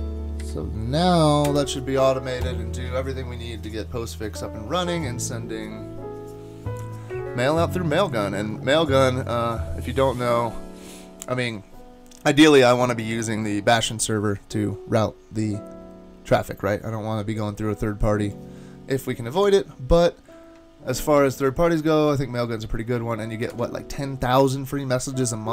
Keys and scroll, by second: 1.5 Return, 19.4 super+Tab, 23.5 super+Tab.